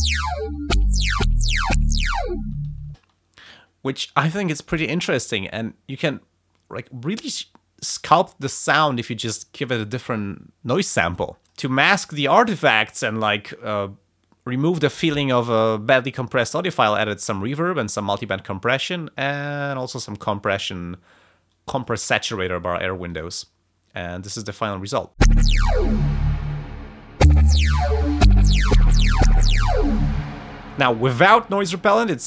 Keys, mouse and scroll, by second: 2.9 space, 5.8 scroll up 2, 11.5 click, 17.9 click, 19.7 click, 21.5 click, 23.1 click, 25.1 space, 30.2 space.